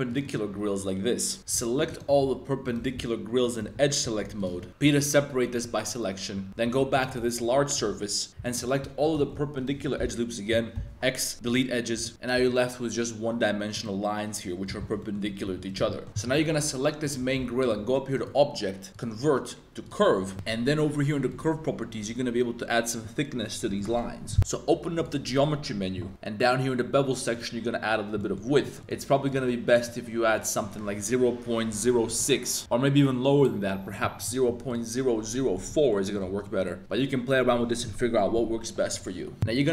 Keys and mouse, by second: 0.2 click, 1.8 alt+shift+click, 2.6 alt+shift+click, 3.4 alt+shift+click, 4.0 super+z, 4.3 alt+shift+click, 4.6 z, 4.7 z, 4.8 p, 6.3 Tab, 6.5 z, 6.6 g, 6.9 click, 7.1 Tab, 7.4 2, 7.8 z, 8.3 super+z, 8.4 alt+shift+click, 9.8 z, 10.7 x, 12.0 z, 12.1 g, 12.3 g, 13.7 click, 15.0 click, 15.1 middle click, 15.4 z, 15.7 right click, 15.9 shift+middle click, 16.3 g, 17.0 click, 17.3 z, 18.1-19.9 right drag, 21.2 click, 24.9 click, 27.3 click, 28.2 middle click, 28.6 middle click, 29.9-32.6 drag, 33.4-34.7 drag, 35.5 middle click, 35.8 shift+click, 36.2 Tab, 36.4 middle click, 36.8 Tab, 39.3 middle click.